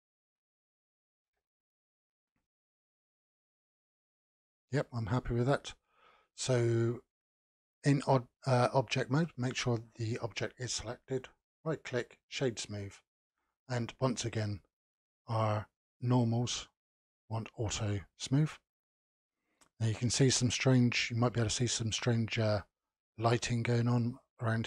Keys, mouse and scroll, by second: 1.2 n, 2.3 Tab, 2.9-3.3 scroll down 3, 3.3-6.1 middle drag, 6.1-6.5 scroll down 1, 9.1 click, 9.5 click, 10.7-13.7 right drag, 14.3 click, 17.2 click, 18.7-21.5 middle drag, 21.5-22.3 scroll up 3, 22.3-24.6 middle drag.